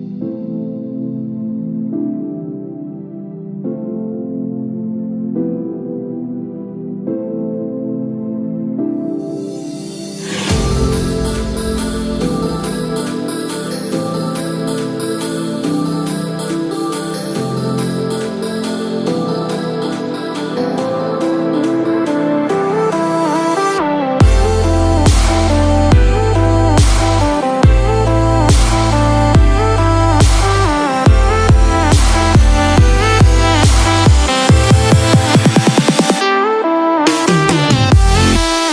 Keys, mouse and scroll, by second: 6.2-6.7 scroll down 2, 6.7 shift+middle click, 9.4 click, 9.9 shift+middle click, 10.2-10.8 scroll up 3, 11.2 shift+middle click, 11.9 click, 14.4 shift+d, 21.6-22.2 scroll down 3, 22.2 middle click, 22.2 scroll down 1, 23.3-23.6 scroll down 2, 23.6 click, 24.0-24.5 scroll down 2, 24.2 middle click, 24.8-25.2 scroll up 5, 25.4 shift+middle click, 25.7 middle click, 28.1 click, 28.4 scroll down 1, 28.7 middle click, 35.4 scroll down 2, 35.9 shift+middle click, 38.6 click.